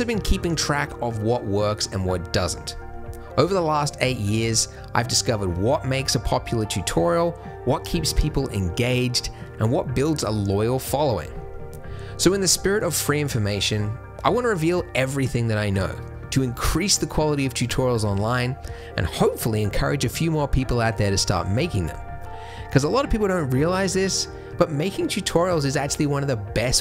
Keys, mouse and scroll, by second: 17.9 middle click.